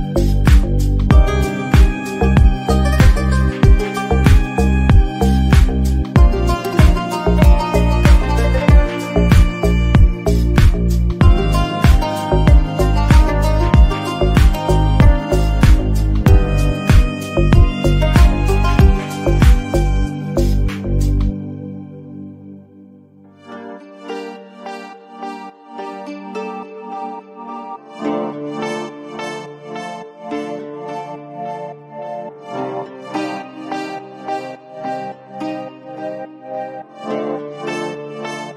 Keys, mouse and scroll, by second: 0.1 shift+middle click, 0.6 scroll up 1, 0.8 Tab, 0.9 drag, 1.0 scroll down 1, 1.2-1.8 middle drag, 2.1-2.4 drag, 2.4 middle click, 3.5 ctrl+z, 4.0-4.7 drag, 5.3-5.9 middle drag, 5.9 click, 6.6 Tab, 6.8 alt+z, 7.2-12.0 typing, 7.5 Tab, 7.6 click, 7.8 alt+z, 7.9 middle click, 8.4-8.9 shift+middle drag, 9.6 middle drag, 9.9 shift+middle click, 10.1-10.5 scroll up 5, 10.2 shift+middle click, 12.6-13.2 drag, 13.3-13.9 middle drag, 14.0 scroll down 1, 14.2-14.6 middle drag, 14.6 drag, 14.9 s, 15.2 right click, 15.8 Tab, 15.9 a, 16.2 alt+s, 17.4 g, 18.1 Tab, 18.2 click, 18.3-18.9 middle drag, 19.2 middle drag, 19.4 drag, 19.7 Tab, 20.0 shift+middle click, 20.1-20.4 scroll up 4, 20.4 /, 20.5 middle click, 21.2 KP_7, 21.5 3, 21.7 click, 22.0 alt+z, 22.3 click, 23.2 ctrl+click, 23.3 middle click, 23.9 alt+z, 24.2 s, 24.6 /, 24.9 s, 25.8 scroll down 1, 25.9 shift+middle click, 26.5 click, 26.6 middle click, 26.9 shift+click, 27.0-27.3 scroll up 2, 27.1 middle click, 27.3 shift+click, 27.5-27.9 scroll down 3, 27.6 middle click, 27.9 shift+middle click, 28.4 shift+d, 28.7 p, 28.9 Tab, 29.1 click, 29.7 scroll down 2, 30.2 ctrl+l, 30.5 middle click, 30.7-31.4 scroll up 4, 30.7 middle drag, 31.4-32.0 middle drag, 32.0 scroll up 1, 32.1 middle click, 32.2 scroll down 1, 32.4 Tab, 32.5 a, 32.8 s, 34.2 scroll down 3, 34.4 Tab, 34.5 click, 35.2 right click, 35.6 scroll up 1, 35.7 Tab, 35.9 a, 35.9 s, 36.8 Tab, 36.8 scroll up 1, 37.0 Tab, 37.2 1, 37.4 alt+z, 37.5 middle click, 37.6 click, 37.8 s.